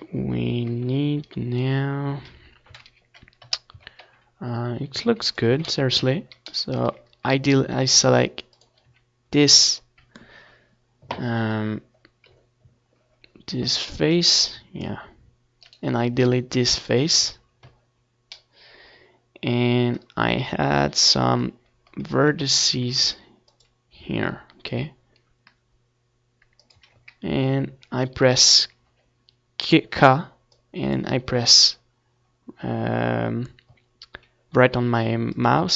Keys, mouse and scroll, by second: 3.7-5.7 right drag, 4.2 x, 5.7-11.2 middle drag, 11.2 ctrl+r, 15.4-16.8 drag, 15.5 a, 16.8-18.7 middle drag, 17.7 k, 31.7-33.4 middle drag, 33.4 a, 35.1 k.